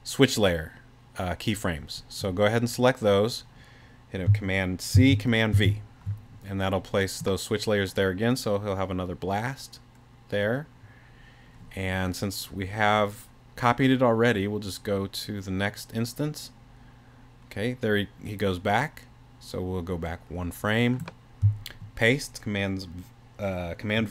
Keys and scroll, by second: 4.9 super+c, 5.5 super+v.